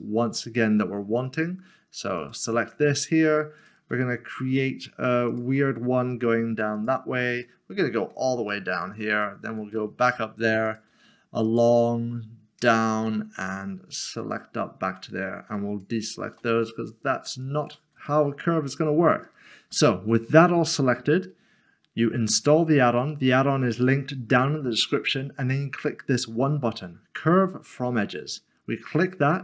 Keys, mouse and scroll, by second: 2.2 ctrl+click, 3.6 shift+click, 4.0 middle click, 5.3 shift+click, 6.8 ctrl+click, 7.4 ctrl+click, 7.6 middle click, 9.1 ctrl+click, 10.8 ctrl+click, 11.5 ctrl+click, 12.7 ctrl+click, 15.6 shift+click, 16.6 ctrl+click, 17.4 ctrl+click, 18.1 ctrl+click, 18.3 middle click, 18.8 scroll down 1, 22.4 click, 28.8 click.